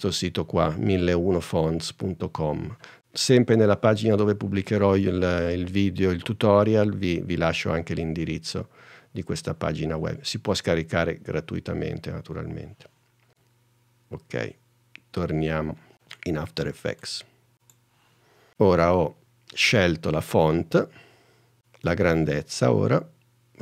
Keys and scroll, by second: 13.3 super+n.